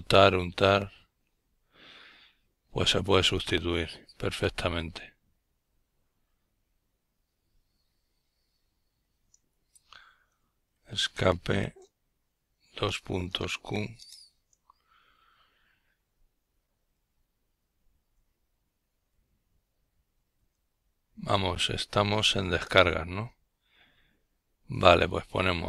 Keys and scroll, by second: 1.2 Escape, 1.2 typing, 3.0-3.9 typing, 4.4 Return, 11.6-13.2 typing, 16.0-19.2 typing, 20.4-21.7 typing, 23.1-23.7 typing, 25.3-25.6 typing.